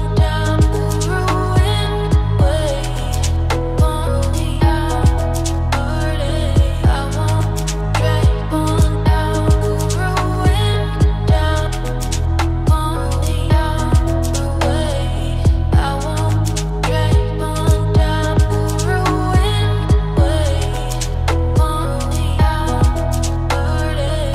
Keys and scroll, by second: 10.8 ctrl+t.